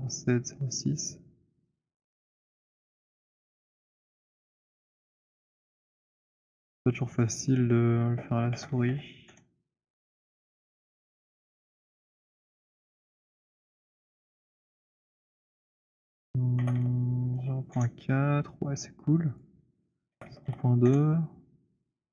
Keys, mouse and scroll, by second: 6.1 click, 7.5 click, 8.4-9.5 typing, 10.9 click, 12.7-14.3 typing, 16.2 click, 16.2-17.9 typing, 19.6 click, 20.0-21.7 typing.